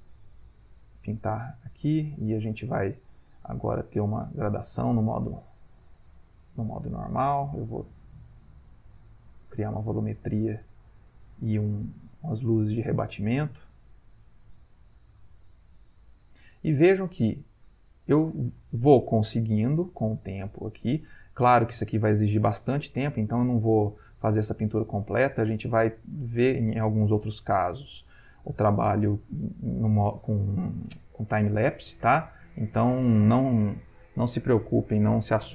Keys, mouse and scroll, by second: 8.0 click, 8.6-14.0 drag, 14.2 click, 15.8-22.7 drag, 23.7-30.4 drag, 31.6-35.5 ctrl+drag.